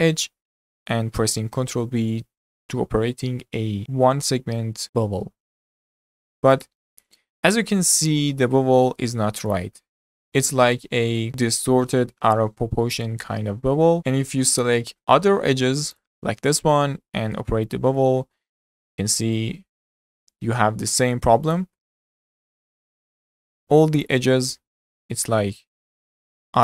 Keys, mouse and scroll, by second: 0.3-3.0 middle drag, 3.0 ctrl+b, 7.2-11.3 middle drag, 14.3-14.8 scroll down 3, 14.8-16.0 middle drag, 16.0 click, 17.0 ctrl+b, 18.0-21.5 middle drag, 21.5 click, 22.2 click, 23.0 ctrl+b, 24.3-26.6 middle drag.